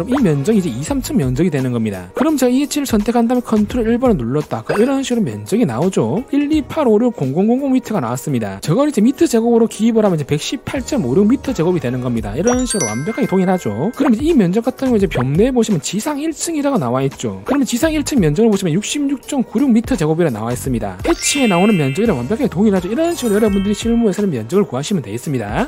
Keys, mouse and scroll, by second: 3.3 click, 15.3 click.